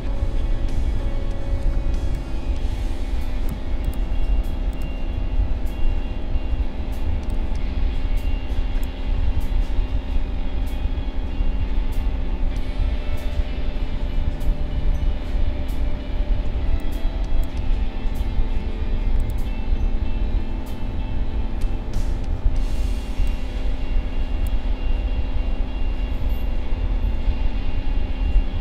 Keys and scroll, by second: 16.5 space.